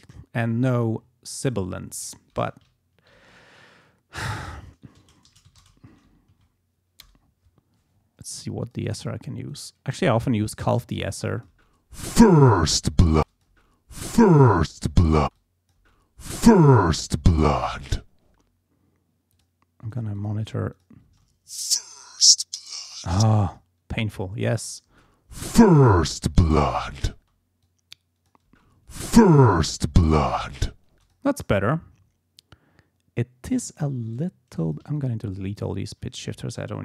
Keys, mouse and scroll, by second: 1.4 click, 3.1 shift+c, 4.4 BackSpace, 4.9 ctrl+a, 5.2 ctrl+shift+t, 5.4 ctrl+shift+a, 5.6 ctrl+shift+space, 5.9 ctrl+shift+d, 6.1 ctrl+shift+e, 6.3 ctrl+shift+s, 7.0 BackSpace, 8.6 click, 9.5 click, 10.9 click, 11.5 space, 13.1 click, 13.1 space, 15.2 space, 15.3 click, 18.2 space, 19.3 click, 19.9 click, 20.7 click, 21.0 space, 23.1 space, 23.5 click, 24.1 click, 24.9 space, 27.1 space, 27.6 click, 28.4 space, 30.9 space, 31.0 click, 34.6 shift+click, 34.9 shift+click, 35.7 shift+click.